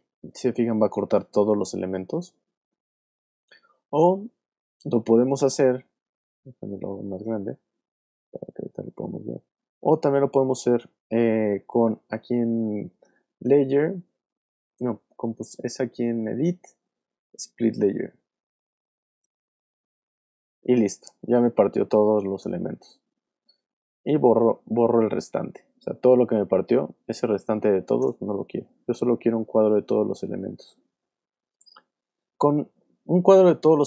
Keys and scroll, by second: 11.4 super+z, 22.4 BackSpace, 25.2 super+z, 28.0 BackSpace.